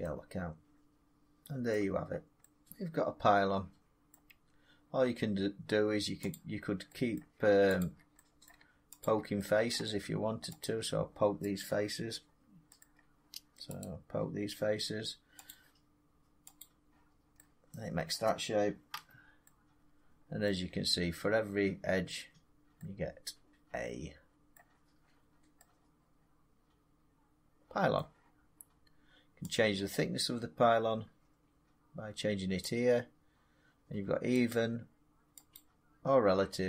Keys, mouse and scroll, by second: 0.6 scroll, 1.2 scroll up 2, 1.6 middle click, 2.0 middle click, 2.4 scroll up 1, 4.0 middle click, 4.2 Tab, 6.2 click, 7.1 middle click, 7.7 shift+click, 8.4 middle click, 8.9 shift+click, 9.6 middle click, 10.5 shift+click, 11.5 right click, 12.7 middle click, 13.7 right click, 16.5 click, 18.0 middle click, 18.8 Tab, 20.3 middle click, 20.8 Tab, 22.0 Tab, 24.4 middle click, 27.9 middle click, 29.4-32.5 middle drag, 32.5 click, 34.4 click, 35.4 click.